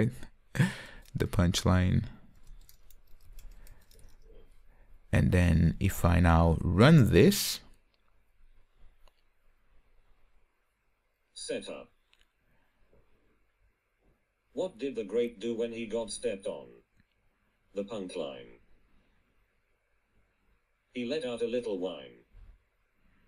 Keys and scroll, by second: 8.4 ctrl+r.